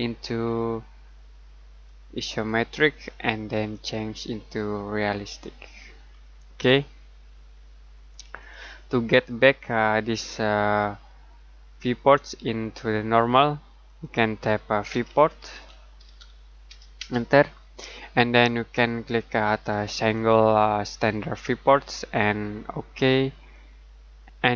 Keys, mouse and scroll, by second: 1.8 click, 8.4 click, 13.8 click, 14.9-17.0 typing, 19.9 space, 20.8 click, 22.9 click.